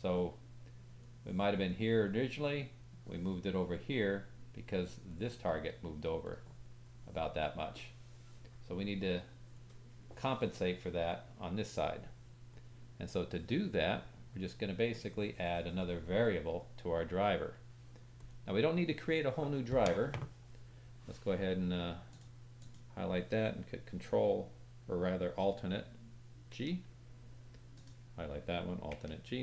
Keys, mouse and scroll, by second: 1.0 click, 1.6-22.2 drag, 1.6-2.9 middle drag, 1.6-2.9 right drag, 6.2-22.2 middle drag, 6.2-22.2 right drag, 22.6 click, 22.6 middle click, 22.6 right click, 26.5 alt+g, 27.7 click, 28.9 alt+g.